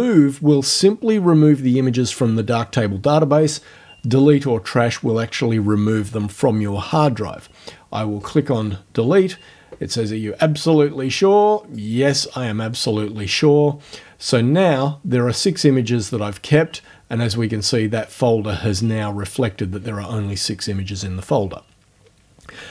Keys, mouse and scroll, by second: 8.2 click, 11.6 click.